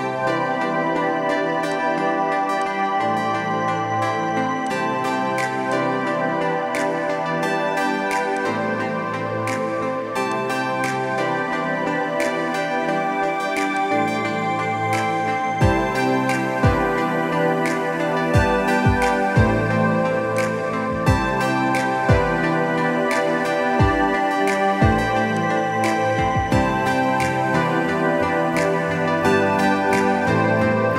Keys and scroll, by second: 1.6 ctrl+=, 1.6 ctrl+z, 6.8 ctrl+z, 11.5 ctrl+z, 12.7 =, 19.5 ], 19.7 ], 20.0 ], 22.6-25.0 typing.